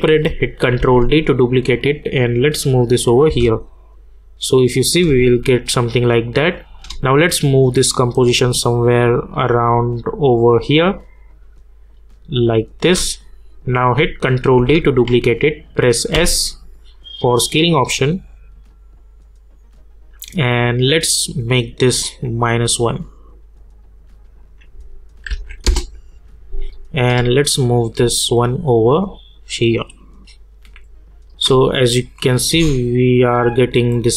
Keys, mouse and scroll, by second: 0.8 ctrl+d, 1.9-3.3 drag, 3.3 space, 6.7-13.7 drag, 14.5 ctrl+d, 16.1 s, 20.2 click, 25.3 -, 25.6 Return, 27.0-32.2 drag, 32.5 space.